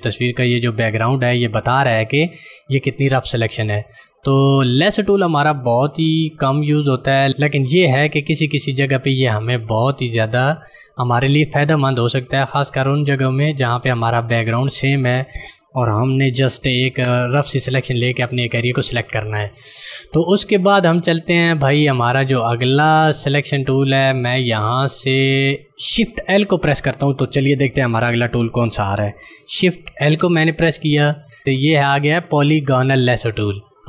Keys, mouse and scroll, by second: 14.8 click, 16.8 Delete, 29.4 shift+Num_Lock, 30.1 l.